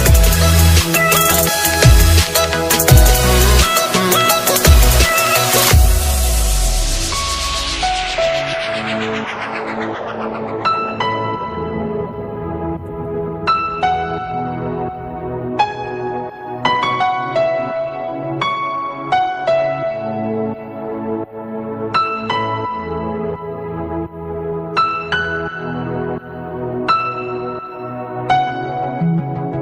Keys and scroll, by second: 1.6 ctrl+space, 4.5 alt+space, 5.8 ctrl+u, 20.4 ctrl+space.